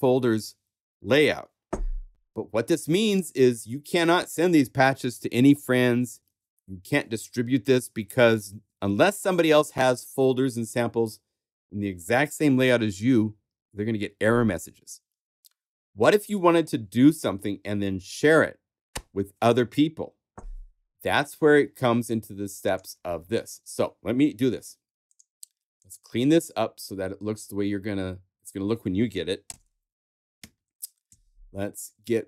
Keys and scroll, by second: 23.2 super+a, 29.4 super+BackSpace, 29.9 super+a, 30.4 super+Right, 31.0 Down.